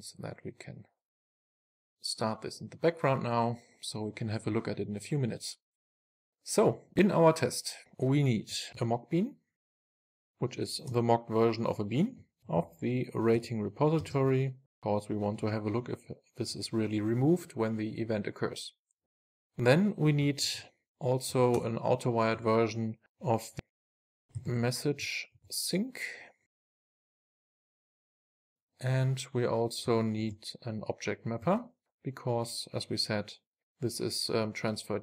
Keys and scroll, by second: 1.8 ctrl+shift+r, 7.8 Tab, 8.8 Tab, 9.7 Tab, 10.3 Return, 13.4 Return, 22.0 Return, 26.7 Return, 28.2 super+s, 31.6 Return.